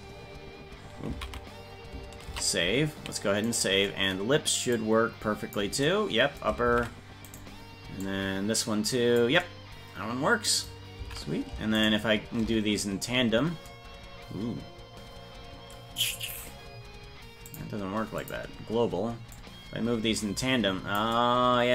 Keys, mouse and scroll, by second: 1.1 ctrl+z, 2.6 ctrl+s, 3.5 right click, 4.7 click, 6.7 ctrl+z, 7.3 right click, 8.0-9.2 drag, 11.0 ctrl+z, 11.8 shift+right click, 17.4 click, 19.3-20.9 drag.